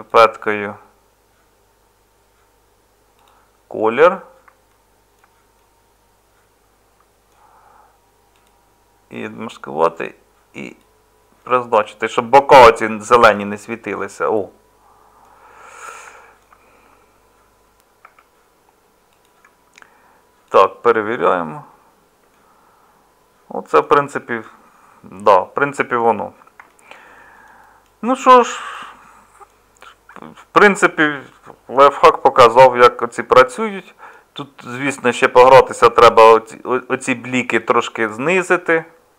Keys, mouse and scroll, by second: 13.2 Tab, 18.0 Tab, 38.3-39.1 middle drag.